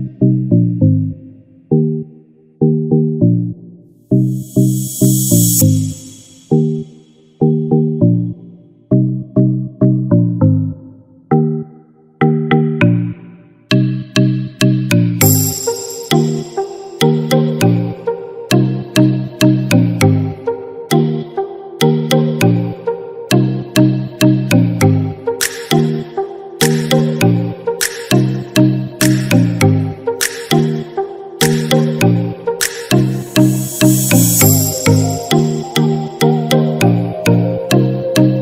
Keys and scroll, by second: 18.8 ctrl+-, 34.1 ctrl+-.